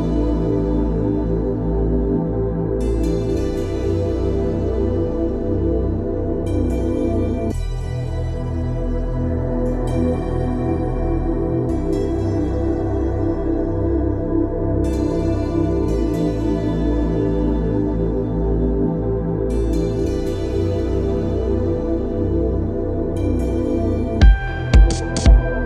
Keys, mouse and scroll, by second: 0.8-1.2 typing, 2.7-7.9 drag, 11.4 ctrl+click, 13.8 right click, 15.5 click.